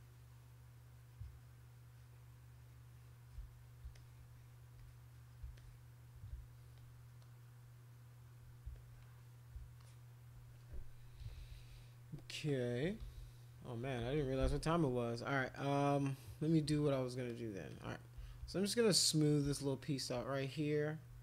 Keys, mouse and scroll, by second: 3.9 alt+click, 4.8 click, 5.5 alt+click, 8.7 alt+click, 9.8 alt+click, 11.0 [, 11.2 [, 11.3 [, 11.5 [, 12.5 click, 12.9-14.2 typing, 15.2 click, 15.5 click, 16.9 alt+click, 17.3 alt+click, 17.7 alt+click, 18.7 alt+click, 19.5 shift+click, 21.1 [.